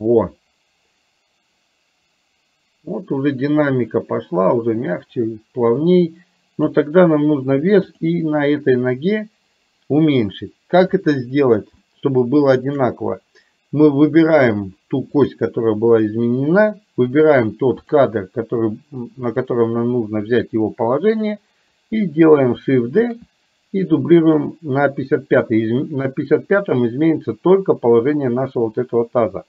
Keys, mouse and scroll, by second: 12.0 shift+middle click, 15.3 click, 17.4 click, 19.5 click, 23.2 shift+d, 26.8 click.